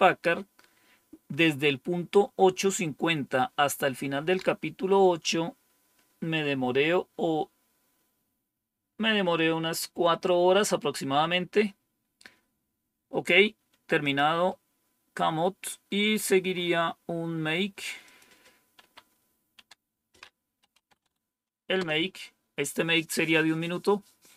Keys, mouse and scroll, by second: 13.9 click, 14.5-14.9 scroll down 1, 16.5-17.3 scroll up 1, 17.3-18.0 scroll down 1, 18.0 click, 18.7 Up, 19.5 Down, 20.3-21.4 typing, 21.7 Return.